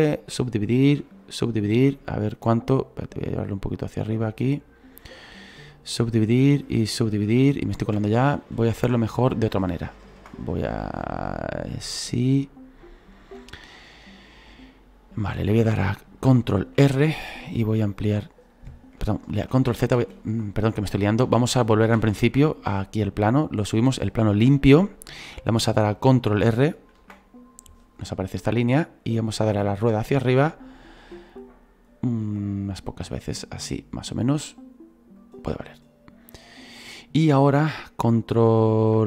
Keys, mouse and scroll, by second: 0.3 w, 1.2 w, 1.7-3.2 middle drag, 3.2-4.3 drag, 4.3-5.8 middle drag, 5.8 w, 6.8 w, 8.2 ctrl+z, 8.4 ctrl+z, 9.6 ctrl+z, 10.8-12.9 drag, 12.9-13.5 scroll down 1, 13.5-18.5 shift+middle drag, 18.5 ctrl+r, 20.9 ctrl+z, 21.2 ctrl+z, 21.6 ctrl+z, 23.0-35.1 drag.